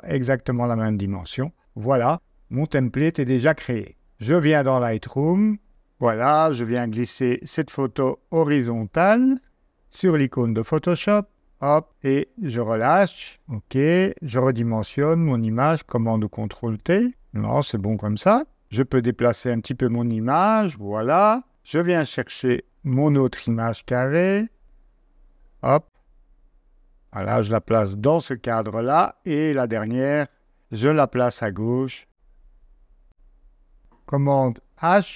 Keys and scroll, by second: 4.1 super+Tab, 14.8 super+t, 21.5 super+Tab, 28.6 super+Tab, 34.7 super+h.